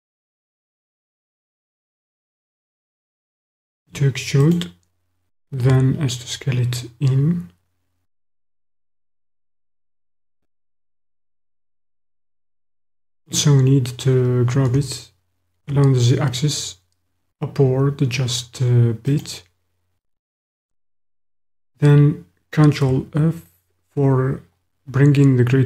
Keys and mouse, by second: 3.8 e, 4.6-5.6 drag, 5.6 s, 12.0 click, 14.6 g, 15.7 z, 19.1 click, 22.8 ctrl+f.